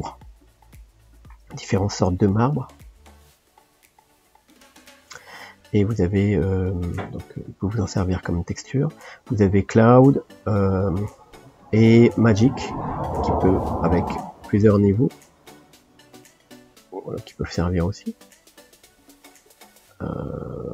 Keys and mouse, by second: 4.4-20.7 drag.